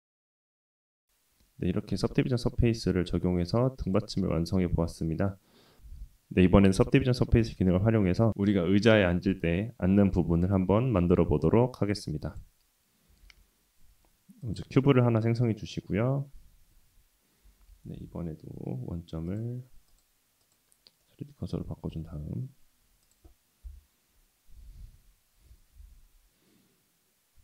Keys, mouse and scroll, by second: 0.3 Tab, 0.4 middle drag, 0.6-1.0 scroll down 1, 1.0 /, 1.3 middle drag, 1.7-2.0 scroll down 4, 1.9 middle click, 2.2 drag, 2.3-2.7 middle drag, 2.8 scroll down 1, 2.9-3.4 middle drag, 12.2 click, 13.2 shift+a, 15.1 scroll down 2, 17.5 g, 19.3-20.6 drag, 21.0-21.4 middle drag, 21.9 s, 23.6 KP_7, 24.6 g.